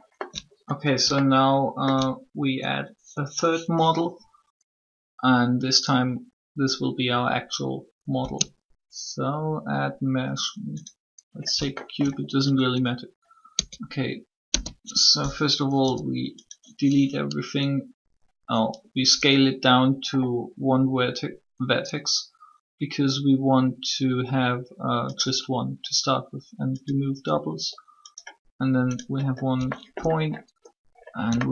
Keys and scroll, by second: 8.2 space, 13.5 Tab, 14.2 s, 15.8 0.